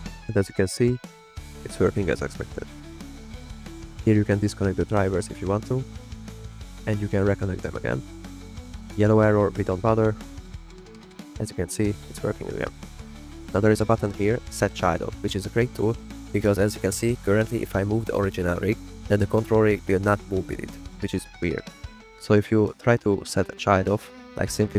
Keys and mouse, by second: 0.1 drag, 1.1 shift+click, 1.7 click, 2.0 g, 3.0 drag, 5.0 drag, 11.9 click, 12.1 drag, 12.2 g, 13.3 click, 13.5 click, 15.7 click, 19.5 click, 20.7 g, 21.3 r, 22.5 r, 22.5 z, 23.3 click, 23.6 click, 23.8 click, 23.9 middle click, 24.3-24.7 drag.